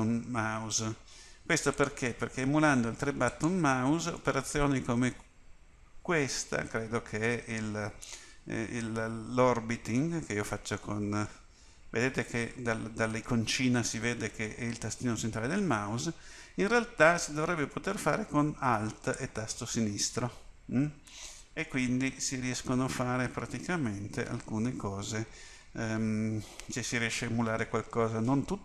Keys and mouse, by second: 4.4 middle click, 11.8-13.6 middle drag, 19.3 middle click.